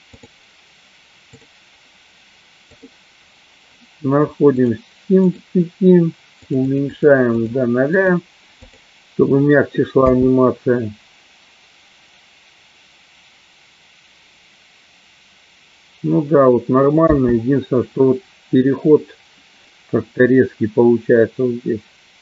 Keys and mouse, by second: 0.2 click, 1.5 click, 4.7 click, 5.3 click, 6.7 click, 7.3 click, 8.2 click, 10.2 space, 17.7 space.